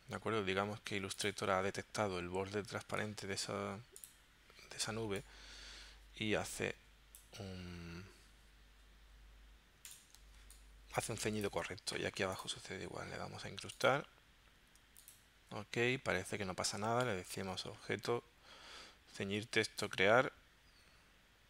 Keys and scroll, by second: 10.2 space.